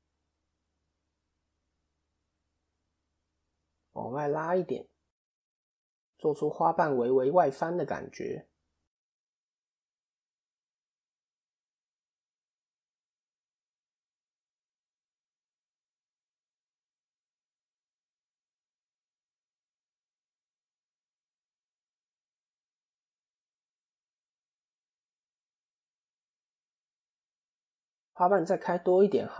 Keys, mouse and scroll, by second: 0.8-1.1 scroll down 2, 1.7 click, 1.7-2.4 scroll down 1, 2.9 KP_1, 4.5 click, 7.9 click, 8.3-9.0 scroll down 1, 9.0-9.6 scroll down 1, 9.0 KP_7, 9.6 KP_3, 9.9 KP_1, 10.6 KP_3, 11.7 KP_7, 13.8 a, 14.9 s, 19.6 KP_3, 21.0 click, 22.1 middle click, 26.9 KP_7.